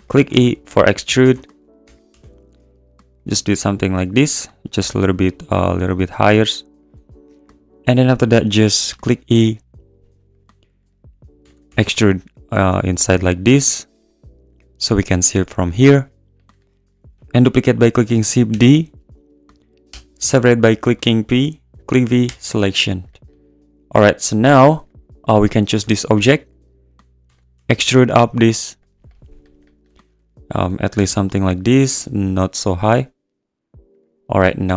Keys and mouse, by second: 0.3 g, 0.4 z, 1.3 ctrl+z, 1.8 e, 2.1 g, 2.2 z, 3.3 `, 4.8 g, 4.9 z, 6.8 click, 8.9 `, 8.9 i, 10.3 click, 10.4 `, 11.4 e, 11.5 click, 11.7 g, 11.8 z, 18.5 shift+d, 19.9 p, 21.8 ctrl+z, 24.5 Tab, 25.8 Tab, 26.3 `, 27.3 e, 27.5 g, 27.6 z, 28.8 click, 29.9 `, 30.0 `, 30.9 g, 31.0 z, 33.9 click.